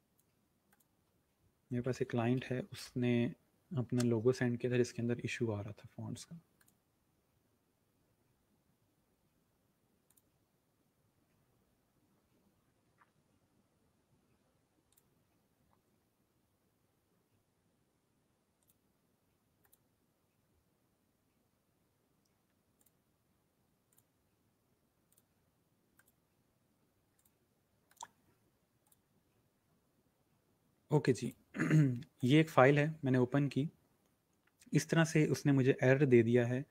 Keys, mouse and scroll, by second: 28.5 click, 31.5 click.